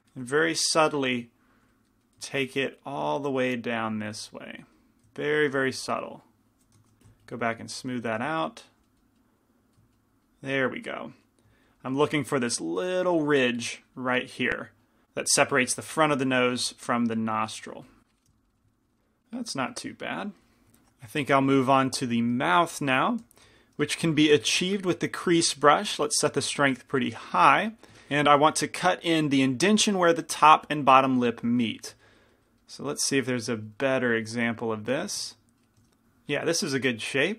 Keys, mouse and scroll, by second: 2.0-5.1 drag, 6.9 shift+f, 8.3 click, 18.0 click, 23.6 shift+c, 23.6 f, 24.9 f, 25.6 shift+f, 27.5 f, 27.8 f.